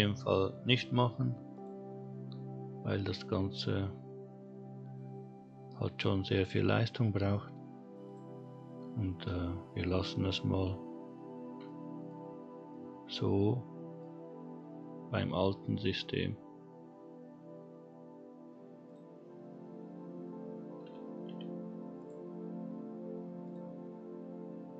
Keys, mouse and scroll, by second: 2.3 click, 4.8 scroll down 2, 8.0 click, 11.6-12.1 shift+middle drag, 12.2 scroll up 1, 12.7-14.0 middle drag, 18.8 click, 20.0-20.9 scroll down 1, 21.2 scroll down 1, 21.2 g, 23.4 click.